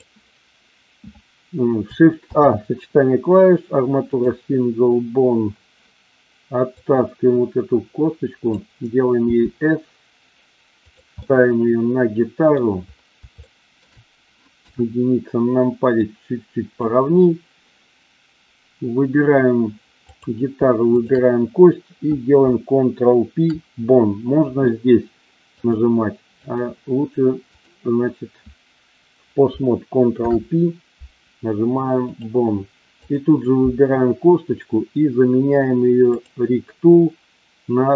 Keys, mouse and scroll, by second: 2.2 shift+a, 6.8-8.6 drag, 9.2 s, 10.8 click, 11.2-12.6 middle drag, 13.4-13.8 shift+middle drag, 14.6 KP_1, 16.1 click, 20.1 click, 20.9 shift+click, 25.6-26.7 drag, 27.5 click, 30.2 ctrl+p, 33.0 click, 36.1 click.